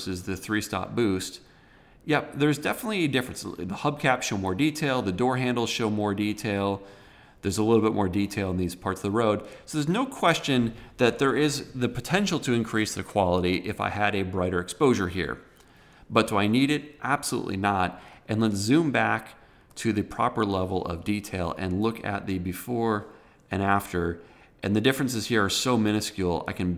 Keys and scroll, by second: 18.3 super+-.